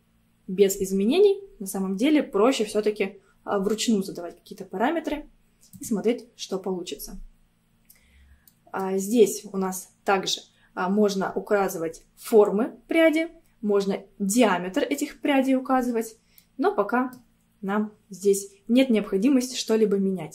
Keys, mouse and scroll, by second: 4.7-5.8 scroll down 2, 5.8-8.5 drag, 8.5-11.7 middle drag, 16.4-17.6 middle drag, 17.6 scroll up 1.